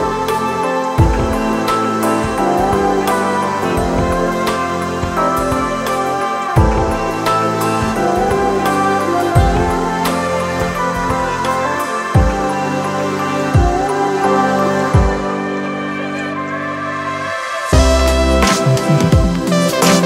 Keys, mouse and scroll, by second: 1.9 ctrl+click, 11.6 ctrl+d.